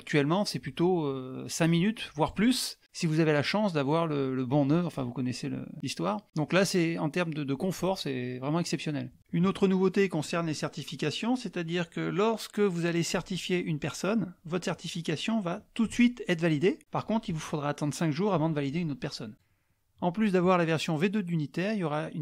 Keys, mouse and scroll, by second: 0.9 click, 1.7 click, 8.0 click, 17.3 click, 17.5 click, 21.9 click, 22.0 click.